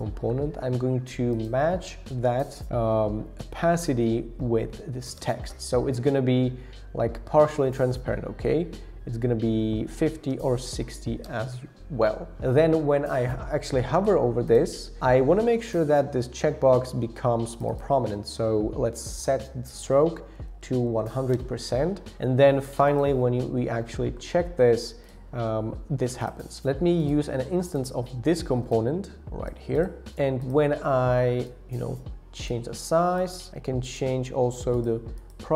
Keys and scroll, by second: 2.6 shift+Down, 3.4 shift+Down, 3.6 shift+Down, 3.7 shift+Down, 4.4 shift+Down, 5.2 Return, 10.4 shift+Up, 11.2 Return, 20.2 shift+Up, 20.3 shift+Up, 20.5 shift+Up, 20.6 shift+Up, 20.7 shift+Up, 20.8 shift+Up.